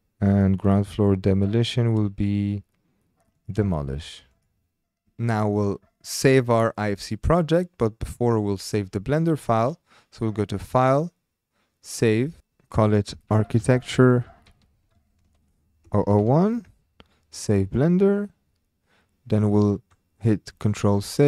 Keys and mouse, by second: 0.0-0.9 typing, 0.3 click, 3.3 click, 4.3 click, 10.6-11.8 drag.